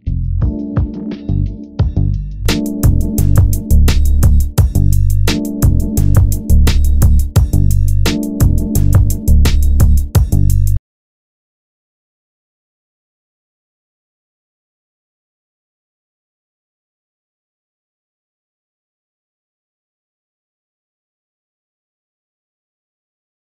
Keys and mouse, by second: 0.7 e, 2.7 click, 3.3 e, 4.1-5.4 drag, 5.9 click, 7.7 click, 8.4 e, 17.4 g, 20.9 g.